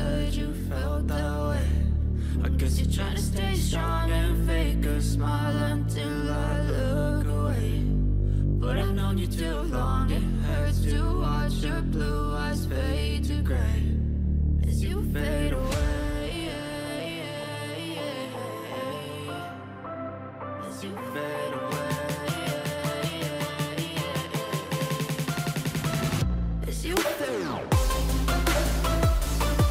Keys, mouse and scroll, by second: 14.6 right click.